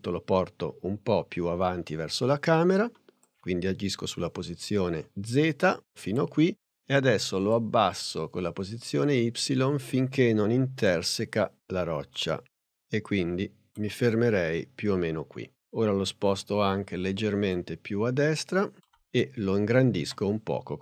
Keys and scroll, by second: 20.1 s.